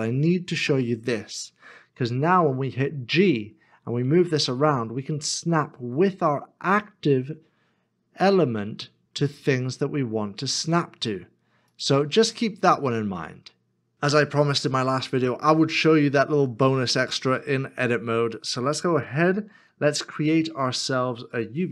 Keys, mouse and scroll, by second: 11.7 ctrl+click, 12.4 ctrl+click, 12.6 middle click, 14.8 scroll down 1, 15.6 shift+middle click, 18.2 scroll up 1, 19.1 shift+a.